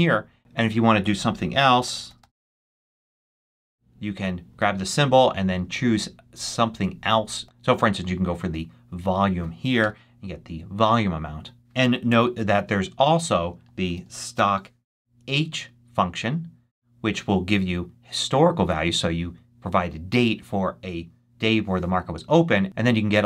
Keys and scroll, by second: 0.3-2.6 typing, 9.7 Return, 12.0 =, 13.3-14.7 typing.